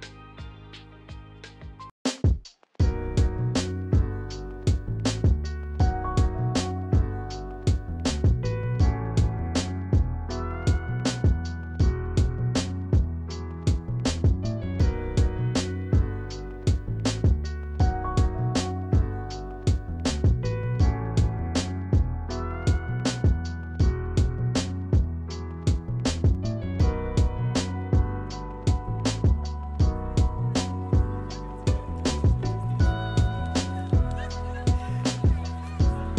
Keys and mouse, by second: 4.2 click, 4.4 Tab, 5.7 Tab, 9.2 click, 10.3 Delete, 12.3 ctrl+z, 13.8 click, 15.2 click, 24.1 click, 25.6 Delete, 27.6 Tab, 29.1 Tab, 30.7 click, 33.0 click, 34.1 shift+click, 35.0 shift+click.